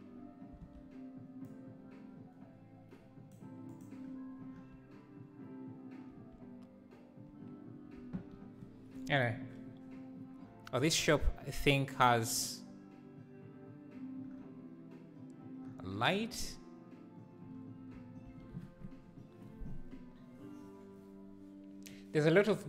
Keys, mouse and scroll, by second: 0.7 alt+a, 1.6-3.9 drag.